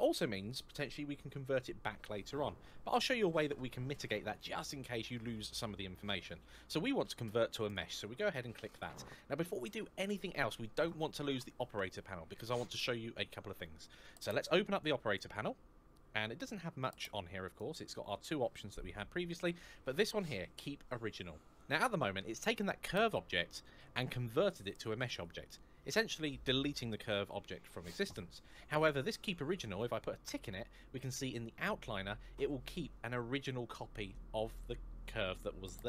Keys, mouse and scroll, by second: 7.4 click, 14.9 click, 17.2 click, 30.0 click.